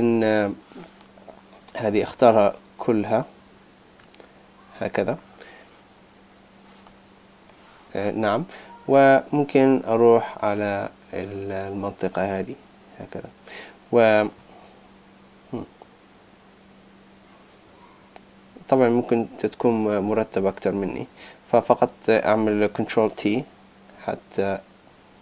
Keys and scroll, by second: 2.0 super+a, 23.0 super+t.